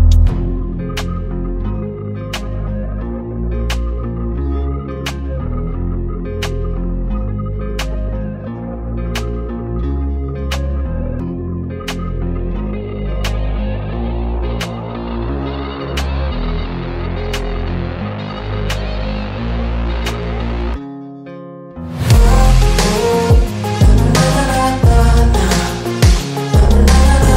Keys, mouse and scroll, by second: 0.1 click, 11.6 click, 12.8 click, 13.3 ctrl+t, 14.0 click, 15.9 click, 16.5 alt+scroll up 1, 16.9 click, 17.9-18.4 alt+scroll down 2, 18.4 click, 22.8 Return, 23.3 click.